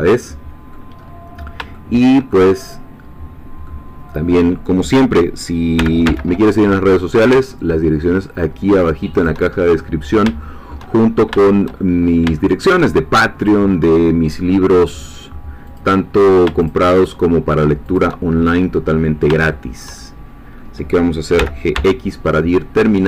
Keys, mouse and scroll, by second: 1.0-1.6 scroll up 2, 1.7 shift+middle click, 2.6-3.9 middle drag, 3.9 scroll up 2, 5.8 g, 6.0 x, 9.2 shift+click, 9.8-12.9 shift+middle drag, 13.4 click, 14.9 click, 15.8 click, 16.6 shift+click, 17.0-18.4 shift+drag, 18.4-20.7 shift+middle drag, 21.4 g, 21.7 x.